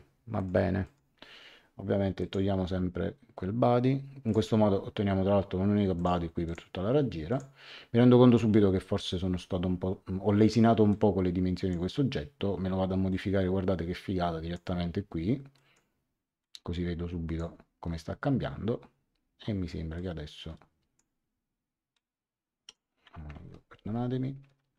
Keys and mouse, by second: 0.3 click, 2.1 click, 4.2 click, 5.9 click, 10.9 click, 13.1 click, 15.5 click, 19.9 click, 21.9 click, 23.3 ctrl+z, 24.6 ctrl+z.